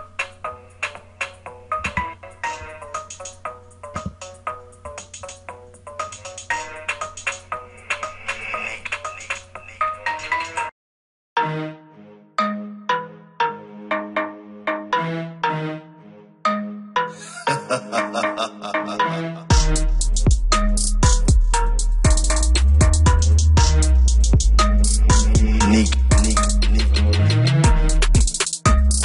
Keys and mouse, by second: 14.4 click, 14.6 click, 18.7 F1, 18.7 click.